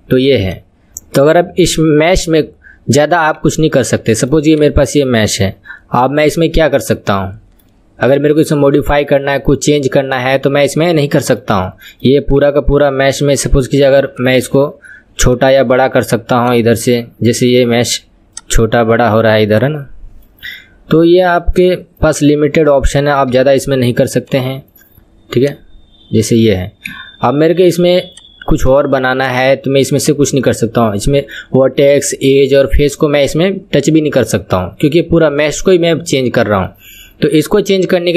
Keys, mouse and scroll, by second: 3.3 KP_1, 3.7 scroll up 4, 4.1-4.5 shift+middle drag, 4.5 click, 5.3 scroll down 2, 7.1-10.4 middle drag, 10.4 scroll up 2, 10.7-12.4 middle drag, 12.4 KP_1, 12.7 q, 14.1-15.4 drag, 16.4 click, 16.9-18.3 middle drag, 18.3 click, 19.5 click, 21.5 click, 23.3 KP_7, 24.3 click, 25.4 click, 26.8 KP_1, 27.3 scroll down 2, 28.1 click, 29.3-38.1 middle drag.